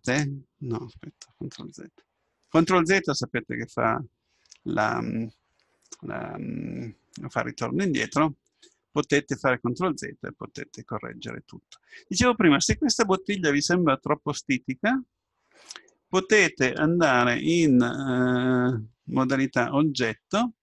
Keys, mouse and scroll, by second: 1.6 ctrl+z, 8.6-10.5 middle drag, 10.9-13.4 middle drag, 17.1 Tab.